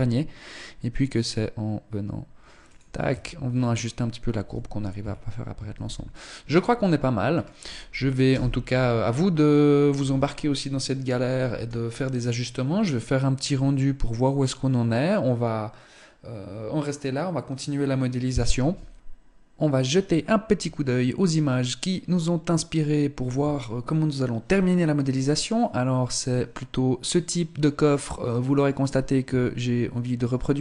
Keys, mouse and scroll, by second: 1.9 Tab, 2.9-4.0 scroll down 3, 4.0 z, 4.5 scroll up 3, 5.5 ctrl+s, 6.1-6.7 scroll down 2, 6.7 scroll up 1, 7.8 KP_0.